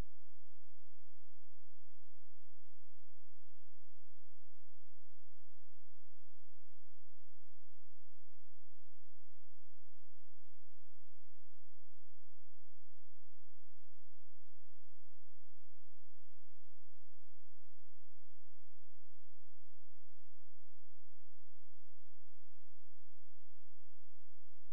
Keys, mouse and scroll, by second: 0.5-3.1 typing, 4.4 ], 5.0 ctrl+space, 7.6 click, 12.3 scroll down 1, 12.6-14.4 scroll up 1, 14.4 click, 16.9-17.2 scroll up 1, 17.2-18.0 scroll down 1, 18.0 click, 22.0 right click, 23.4 k.